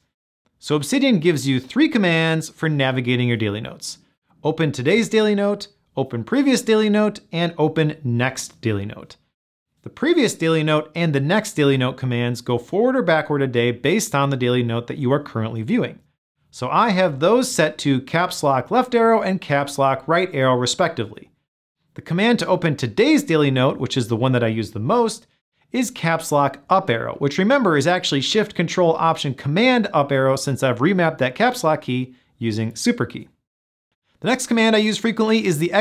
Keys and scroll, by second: 11.4 ctrl+alt+shift+super+Left, 15.9 ctrl+alt+shift+super+Right, 27.0 ctrl+alt+shift+super+Up.